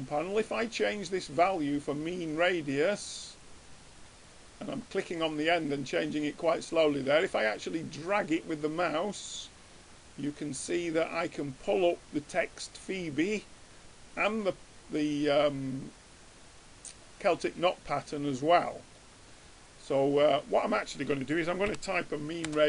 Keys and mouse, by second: 2.4-9.5 drag, 15.4 middle click, 16.2-19.3 middle drag, 20.6-22.6 drag.